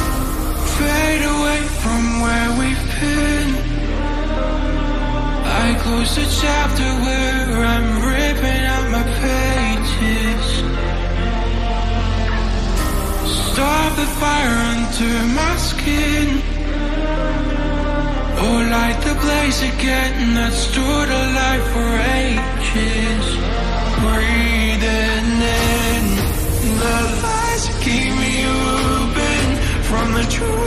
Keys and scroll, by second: 4.1 ctrl+d, 4.1 BackSpace, 6.0 BackSpace, 12.0 Return, 16.1 ctrl+a, 21.0 ctrl+d.